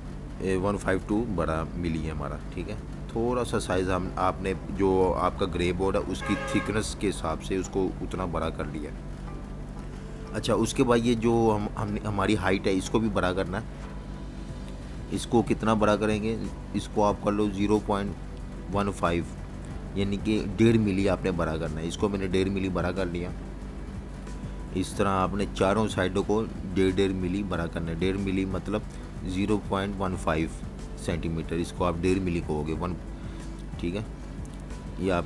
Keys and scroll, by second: 3.9 super+-, 5.6 super+2, 6.2-8.1 typing, 21.5-23.0 typing, 25.9 Return, 32.2-34.2 typing.